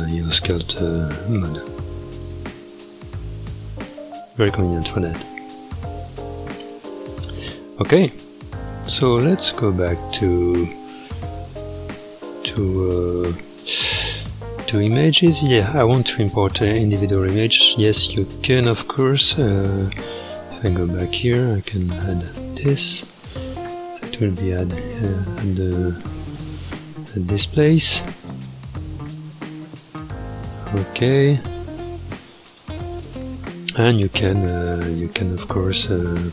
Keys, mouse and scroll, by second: 0.0-3.2 drag, 3.2-3.8 scroll down 4, 4.3 click, 5.1 ctrl+Tab, 7.8-9.3 scroll down 5, 10.6 scroll down 5, 11.9-12.7 scroll down 6, 13.4-14.1 scroll up 5, 15.2-18.4 drag, 22.9-25.0 scroll up 15, 25.0-25.3 scroll up 4, 26.3-29.2 drag, 29.2-32.5 scroll up 25, 32.5 click, 32.9 click, 33.4-34.0 scroll down 1.